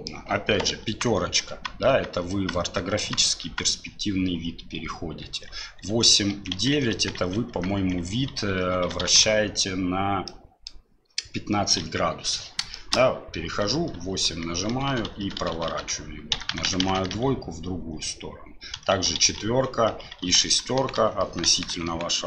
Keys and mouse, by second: 0.8-3.4 typing, 5.2-9.0 typing, 10.3 click, 10.3 KP_8, 11.8 KP_1, 12.7 shift+click, 13.6-22.2 typing.